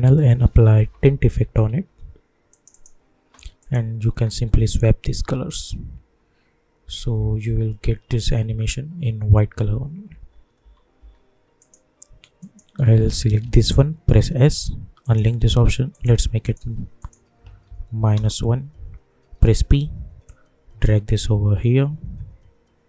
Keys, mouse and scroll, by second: 0.0-1.6 typing, 2.5 click, 4.1 space, 10.1 space, 11.6 click, 13.4 ctrl+d, 14.1 s, 15.0 click, 17.9 -, 18.1 Return, 19.4 p, 20.2-22.8 drag.